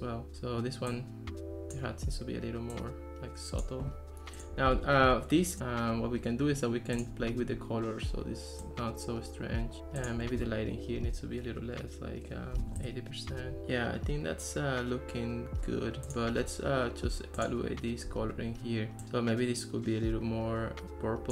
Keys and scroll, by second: 4.8 Escape, 12.6 8, 12.8 Return.